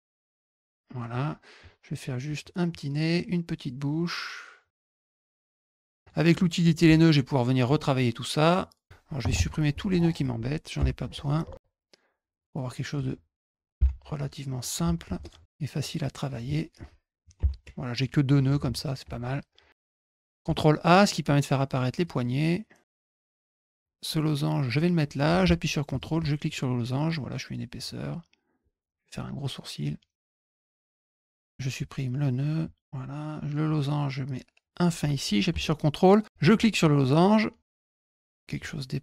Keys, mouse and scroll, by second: 0.3 click, 0.9 middle click, 2.2 click, 3.8 click, 5.3 click, 5.7 middle click, 5.8 middle click, 6.6 click, 7.6 click, 8.4 click, 12.1 click, 15.2 click, 15.7 click, 19.8 click, 20.0 click, 20.4 a, 21.6 click, 22.5 click, 23.3 click, 23.4-24.7 drag, 25.8 ctrl+click, 26.4-27.7 drag, 28.5 click, 29.9 click, 30.3 middle click, 30.5 click, 30.8 click, 31.4 ctrl+alt+click, 32.6 click, 33.3-34.8 drag, 36.2 ctrl+click, 36.7-38.4 drag.